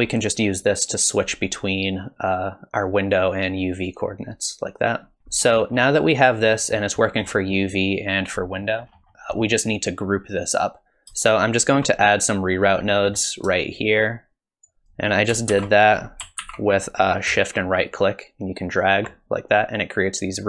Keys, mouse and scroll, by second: 0.6 click, 5.2 shift+middle click, 5.2-6.5 scroll down 10, 6.5 middle click, 7.0 middle click, 8.4 middle click, 8.9 scroll up 1, 9.0 middle click, 9.0 shift+right click, 9.0 click, 9.0-9.4 scroll down 1, 9.4 middle click, 9.4 scroll down 2, 12.6-13.5 scroll up 5, 12.9 middle click, 13.7 shift+right click, 14.8 g, 15.5 ctrl+z, 16.4 ctrl+z, 17.9 shift+right click.